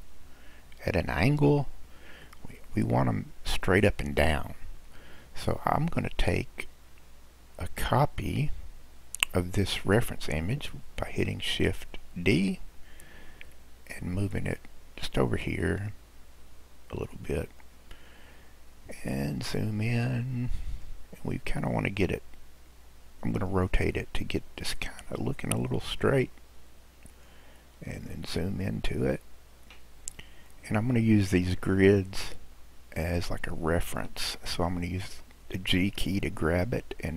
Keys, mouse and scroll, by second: 4.8-6.3 scroll down 5, 6.3 click, 12.2 shift+d, 19.0-20.1 scroll up 2, 20.1-23.1 drag, 23.7 r, 27.6-30.5 scroll up 6, 30.5-31.8 drag, 31.8-34.0 scroll up 1, 34.0-35.1 scroll up 1, 35.8 g.